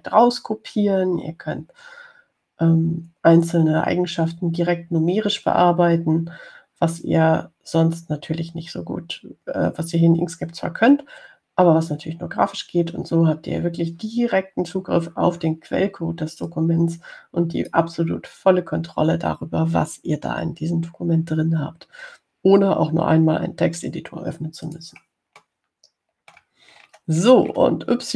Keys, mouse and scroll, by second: 17.7-19.1 drag, 25.9 click, 26.7-27.8 middle drag.